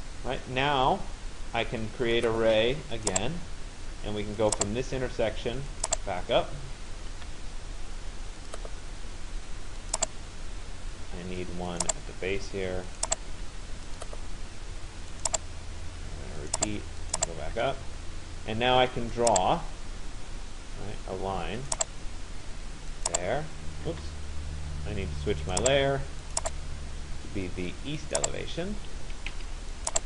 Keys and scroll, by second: 7.0 Return, 13.0 Return, 17.3 Return, 23.5 Return, 28.7 Escape.